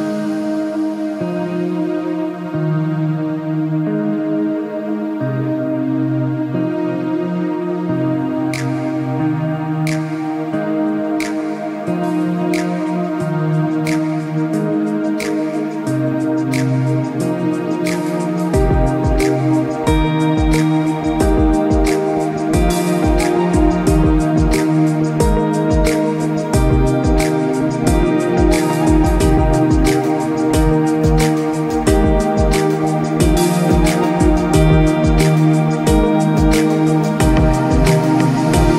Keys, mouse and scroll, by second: 0.1 scroll down 1, 0.2 space, 0.4 scroll up 1, 0.5 click, 1.1 alt+scroll up 2, 1.3 alt+scroll down 1, 1.4 click, 1.5 space, 2.2 scroll up 1, 2.3 alt+scroll down 1.